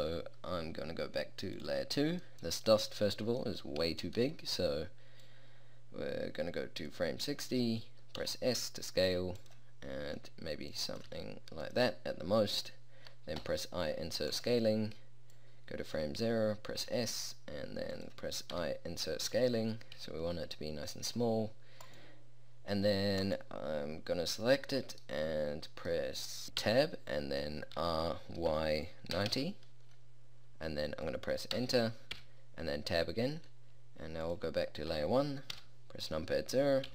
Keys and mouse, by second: 8.3 s, 10.2 s, 11.2 s, 13.5 i, 17.0 s, 18.6 i, 20.1 a, 26.7 Tab, 27.9 r, 32.3 Tab, 35.6 KP_0.